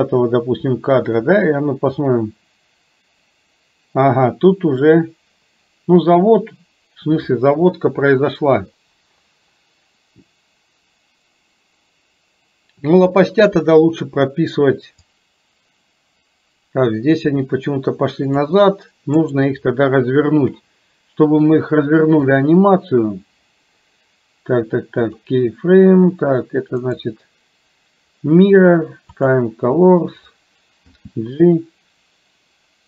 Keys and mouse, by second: 2.1-13.2 drag, 15.2-18.7 drag, 19.2-20.6 right drag, 22.4-25.1 drag, 26.8-29.3 right drag, 31.0 g.